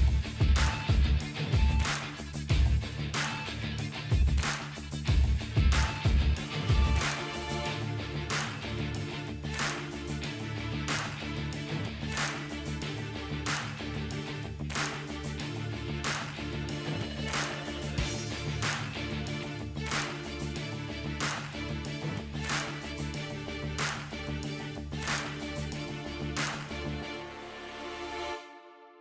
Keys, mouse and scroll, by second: 10.6-13.1 drag, 26.0 click.